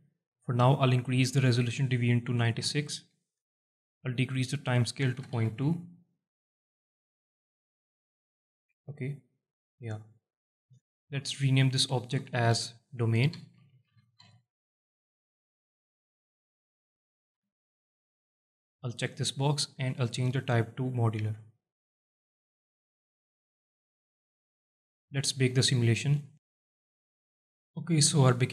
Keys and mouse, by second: 1.5-3.8 drag, 4.5-6.3 drag, 10.3 alt+middle drag, 10.9 shift+middle click, 11.7 F2, 16.2 click, 17.0 alt+shift+middle drag, 17.5 alt+middle click, 19.4-21.4 drag, 23.6 alt+shift+click, 26.2-28.5 drag.